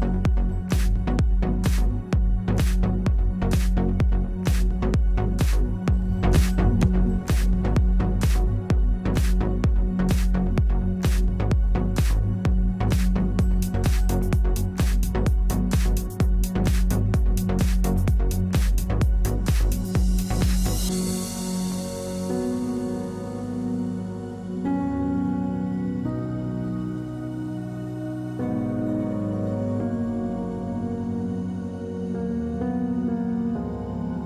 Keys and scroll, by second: 7.5 w, 10.7 3, 14.7 space, 15.4 space, 22.0 r, 25.8 w, 27.3 space.